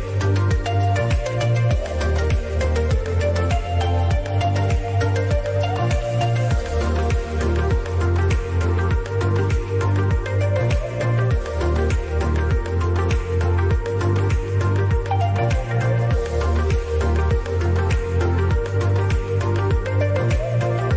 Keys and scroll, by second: 4.6 ctrl+z, 8.7 ctrl+KP_Subtract, 8.9 ctrl+KP_Subtract.